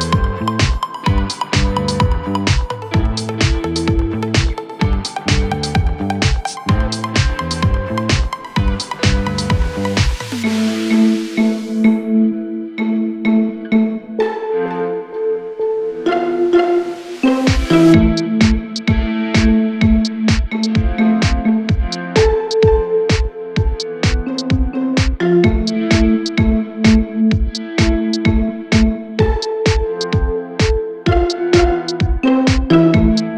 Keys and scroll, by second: 12.6 F3, 16.4 Caps_Lock, 22.7-25.7 typing, 27.3 Return, 27.5-31.4 typing.